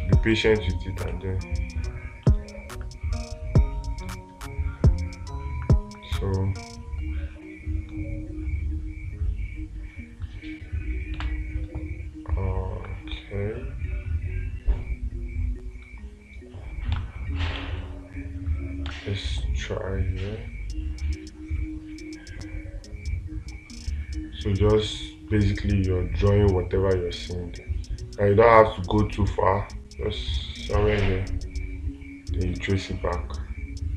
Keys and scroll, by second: 11.7 space, 17.4 space, 19.3 space.